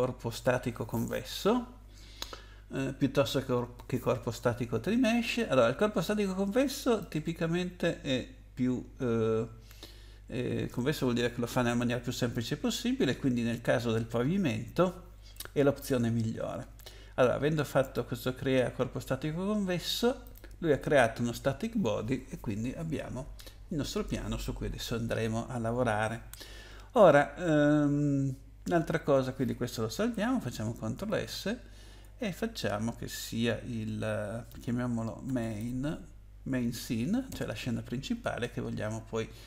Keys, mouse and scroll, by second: 6.8 click, 17.8 click, 20.2 click, 31.1 ctrl+s, 34.4-36.0 typing, 37.3 Return.